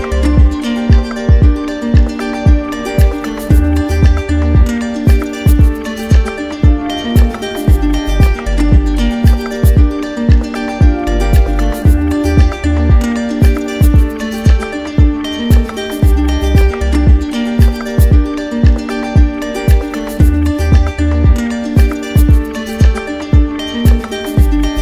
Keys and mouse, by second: 5.5 click, 6.2 shift+click, 7.4 alt+click, 16.3 click, 16.7 shift+click, 17.8 shift+click, 18.9 alt+click.